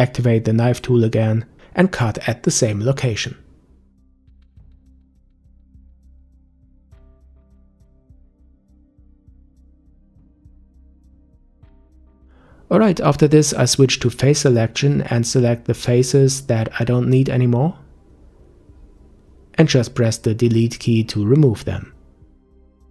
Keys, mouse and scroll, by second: 0.5-1.1 scroll up 1, 1.1-2.5 scroll up 2, 2.5 k, 9.9-10.4 scroll down 6, 11.0-13.8 middle drag, 13.8-15.7 scroll up 2, 15.7 click, 17.5 click, 18.7 click, 21.2 Delete.